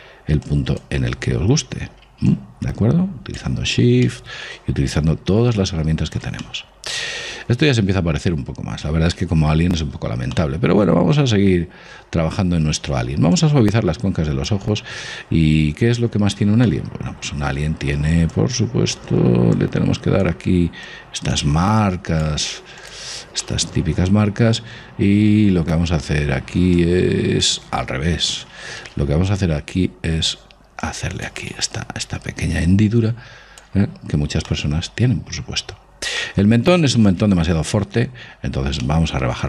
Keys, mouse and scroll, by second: 4.3-6.3 middle drag, 5.3 click, 6.7-8.5 middle drag, 10.1-10.6 scroll up 1, 10.6-13.4 middle drag, 13.4 scroll down 1, 13.6 scroll up 1, 13.7 click, 16.5-18.6 middle drag, 18.6-24.9 drag, 24.8-27.0 middle drag, 27.0 click, 28.4 ctrl+z, 29.6-33.8 drag, 34.3-38.3 middle drag, 39.2-39.4 middle drag.